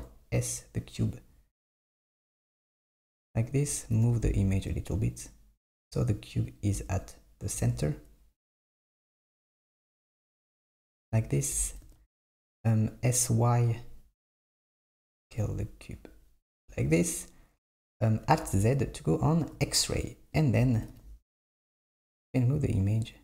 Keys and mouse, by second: 3.6 click, 4.1 g, 7.0 click, 7.6 s, 11.6 s, 18.5 alt+z, 20.4 click, 20.9 g.